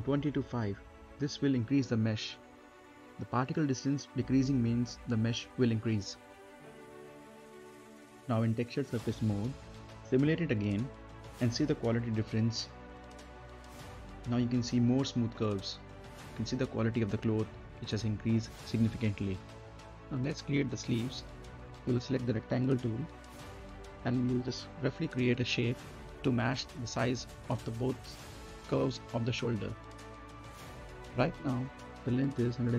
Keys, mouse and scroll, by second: 0.5 click, 2.2 click, 4.8 scroll down 1, 5.0 middle click, 5.3-5.6 scroll up 1, 5.6 right click, 6.1-6.5 scroll down 1, 6.5 right click, 7.2 click, 10.2 scroll up 1, 10.4 middle click, 10.7-11.3 scroll down 1, 11.3 space, 12.3 click, 12.7 space, 12.9 right click, 13.5 scroll down 1, 13.7 middle click, 14.0 right click, 14.4 scroll down 1, 14.7 middle click, 15.7 scroll down 1, 15.9-20.2 right drag, 20.2 middle click, 20.3 scroll down 1, 20.7 middle click, 21.8-27.1 drag, 27.1-27.4 scroll up 1, 27.4 middle click, 28.0 scroll down 1, 28.5 middle click, 29.0 scroll down 1, 29.3 middle click, 29.4 scroll up 1, 29.7 middle click, 30.6 z, 31.7 click.